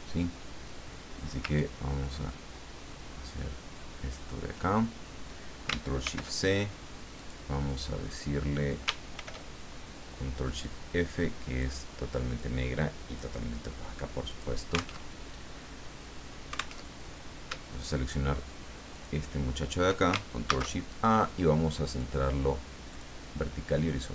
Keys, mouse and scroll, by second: 1.6-4.3 ctrl+drag, 6.0 ctrl+shift+c, 7.1 click, 9.1 ctrl+shift+f, 10.6-11.8 drag, 12.3-13.4 drag, 14.3 click, 15.0 alt+Tab, 16.8 alt+Tab, 18.9 shift+click, 20.4 ctrl+shift+a, 21.9 click, 22.9 click.